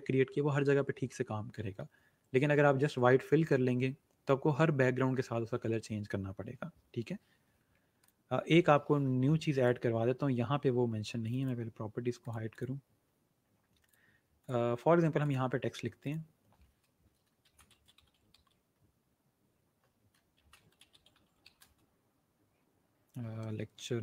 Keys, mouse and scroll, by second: 8.0 click, 17.1-18.8 typing, 20.0-21.8 typing, 23.0-23.8 typing.